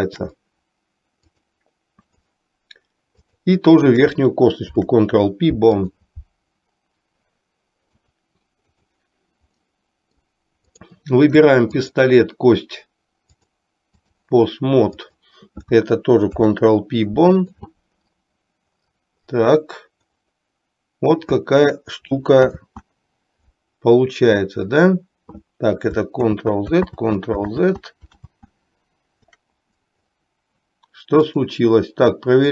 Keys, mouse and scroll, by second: 0.2 shift+click, 1.5-2.5 drag, 3.2 click, 4.8 ctrl+p, 8.2 click, 9.7-10.6 middle drag, 10.8 click, 11.8 shift+click, 13.6 click, 15.2 click, 16.3 ctrl+p, 22.6 ctrl+z, 26.5 ctrl+z, 27.1 ctrl+z, 27.7 ctrl+z, 28.3 ctrl+z.